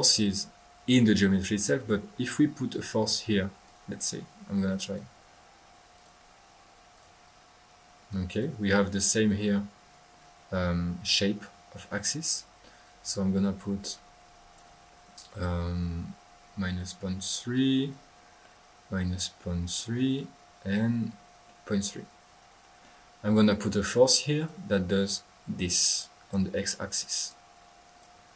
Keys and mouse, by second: 3.6-5.1 drag, 5.3 drag, 5.9 click, 6.9-8.7 drag, 13.0-14.8 drag, 16.7-18.0 drag, 18.4-19.9 middle drag, 20.1-20.9 drag, 21.4-23.0 middle drag, 23.2-24.7 drag, 26.0-26.4 drag, 26.9-27.4 drag, 27.5 click, 27.9 click.